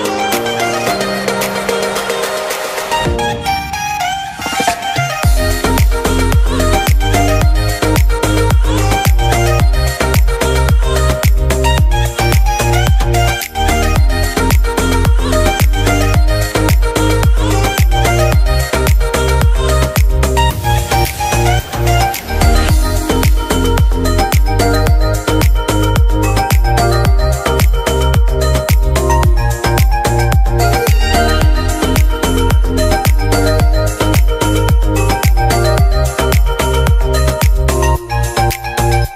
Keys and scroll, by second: 23.4 ctrl+j, 25.3 ctrl+], 35.2 ctrl+].